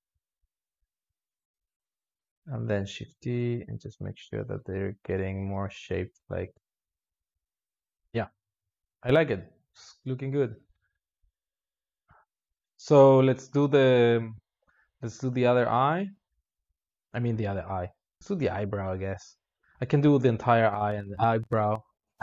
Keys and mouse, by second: 0.2 x, 0.9-2.7 drag, 2.7 shift+e, 5.7-6.2 drag, 6.2 space, 6.8 alt+shift+z, 7.2 alt+shift+z, 12.4 space, 12.9-15.3 drag, 15.6 space, 19.4 space.